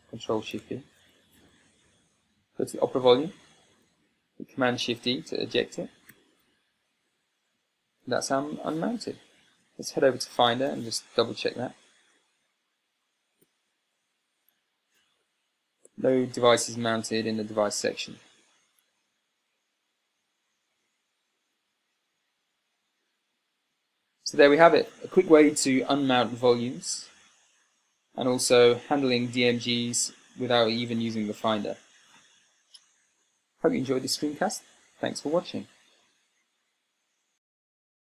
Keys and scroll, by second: 6.7 super+e, 10.9 super+Tab, 14.1 super+n, 21.0 super+Tab, 37.9 super+Tab.